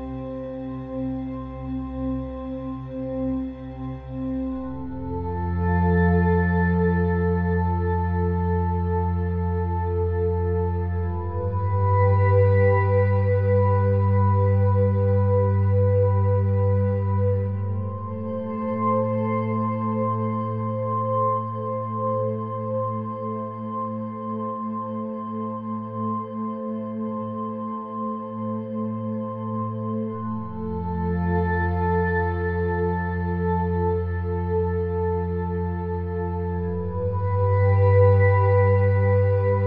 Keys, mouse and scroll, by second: 0.0-3.7 drag, 1.3 Tab, 3.8-5.6 middle drag, 6.0-7.8 drag, 8.2-11.1 drag, 12.0 e, 14.8-16.6 drag, 17.8 ctrl+r, 21.9-23.4 middle drag, 23.3 KP_1, 32.0-35.4 middle drag, 35.4 shift+a.